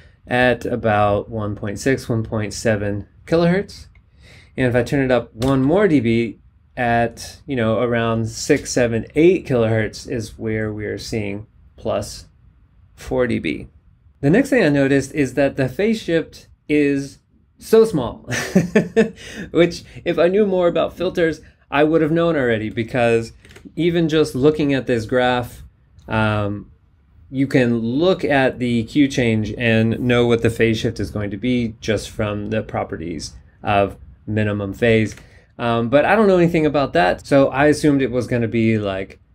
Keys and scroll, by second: 5.4 super+Up, 23.5 super+Tab, 35.1 super+Tab.